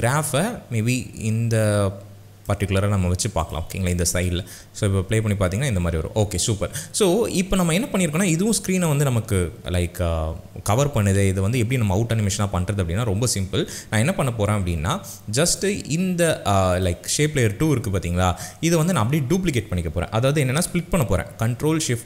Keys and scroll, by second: 4.4 space.